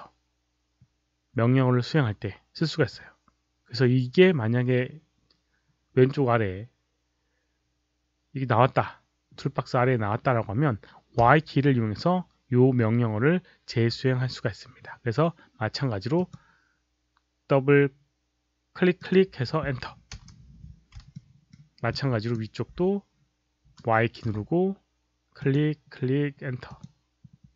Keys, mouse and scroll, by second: 11.1 y, 16.1 click, 18.9 click, 20.0 Return, 21.0 alt+middle click, 21.8 alt+click, 24.2 y, 25.4 click, 26.6 click.